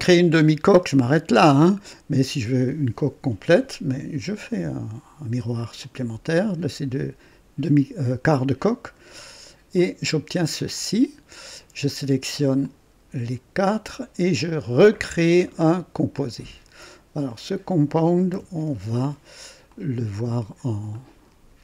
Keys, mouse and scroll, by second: 0.7-2.7 drag, 4.4 click, 5.8 click, 8.7 click, 9.7 click, 10.7 click, 12.6 ctrl+click, 13.5 ctrl+click, 14.9 click, 15.7 click, 17.2 click, 18.6 ctrl+d, 19.6 ctrl+click, 20.9 click.